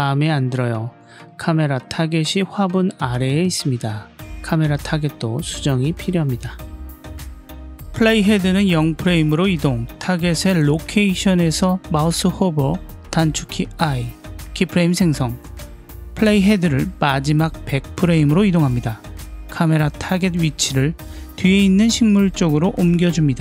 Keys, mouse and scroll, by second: 2.4 click, 5.3 click, 8.3-10.0 drag, 13.0 i, 16.4-18.1 drag, 19.5 click.